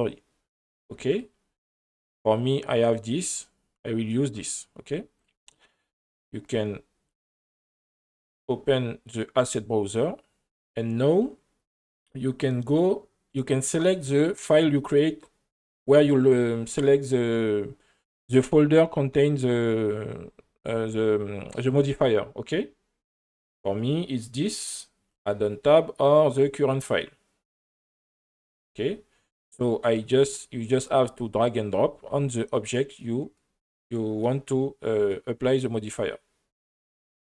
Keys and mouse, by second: 6.4 click, 8.0-10.0 drag, 11.2-14.8 drag, 23.7-25.3 drag, 26.3-28.1 drag, 29.9 click.